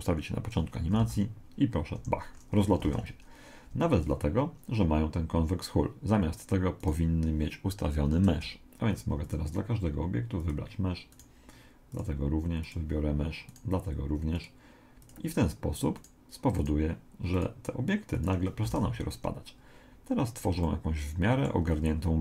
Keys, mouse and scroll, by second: 0.0 click, 1.0 alt+a, 2.0 Escape, 2.3 middle click, 2.9 alt+a, 3.7 Escape, 6.8 right click, 9.3 click, 11.1 right click, 11.9 click, 13.5 right click, 14.3 click, 16.0-18.3 right drag, 17.3 click, 18.7 alt+a, 20.7-22.1 middle drag.